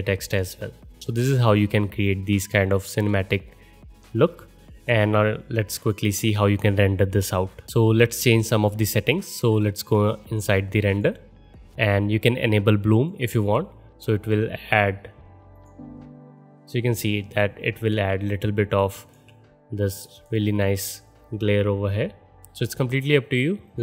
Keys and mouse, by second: 1.0 space, 10.3-12.9 drag, 13.0-15.5 drag, 20.3 click, 20.5 middle click, 20.5 right click, 20.7-23.8 drag, 23.7 middle click, 23.7 right click.